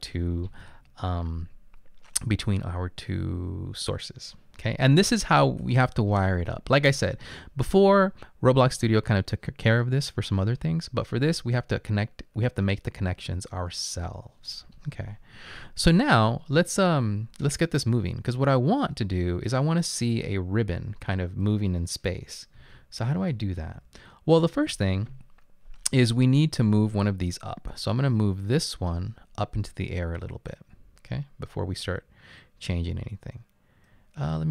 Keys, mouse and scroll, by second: 22.7-23.7 typing, 28.4-29.1 typing, 28.4 click.